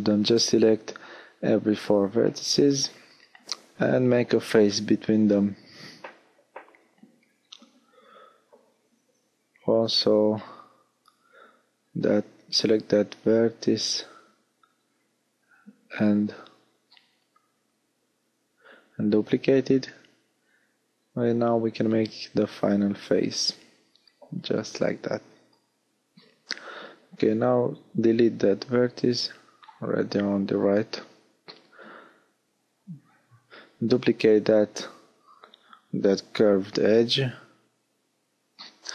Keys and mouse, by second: 0.1 f, 3.5 shift+f, 5.7 f, 7.1-8.9 middle drag, 8.2 alt+h, 10.7-12.1 middle drag, 11.9 shift+d, 12.9 click, 15.6 l, 16.3 l, 17.3 h, 22.3 f, 25.2 x, 29.5 shift+d, 38.7 ctrl+z, 38.8 ctrl+z.